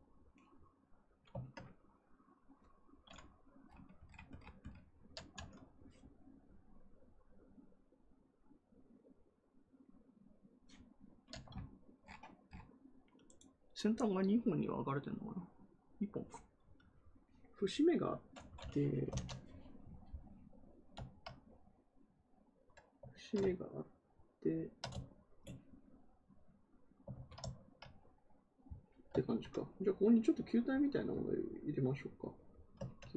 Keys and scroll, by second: 18.8-19.6 typing, 27.0 ctrl+z.